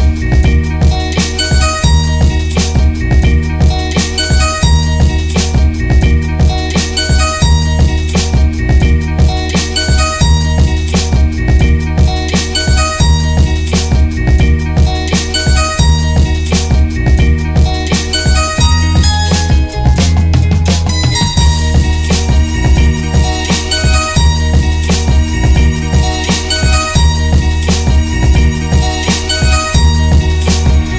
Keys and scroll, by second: 2.1 Down, 5.7 ctrl+u, 21.3 ctrl+g, 30.0 shift+Tab.